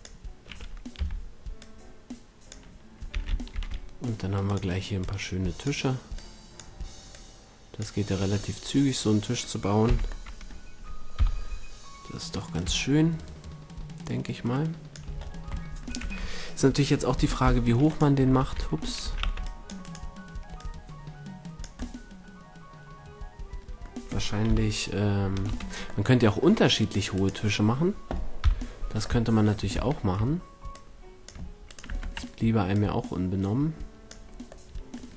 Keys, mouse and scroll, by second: 1.0 z, 1.2 click, 1.6-3.4 drag, 3.1 s, 4.5-5.6 drag, 8.1-8.8 drag, 8.8-10.3 middle drag, 9.8 z, 11.2 KP_1, 15.2-18.0 middle drag, 16.0 Tab, 17.1 c, 18.2 Tab, 19.0 a, 19.2 c, 20.6-23.1 drag, 24.4 KP_1, 25.4 Tab, 28.4 KP_1, 28.6-29.0 right drag, 30.7-31.8 drag, 31.6 middle click, 31.8 Tab, 32.4-34.0 drag, 32.4-33.5 middle drag.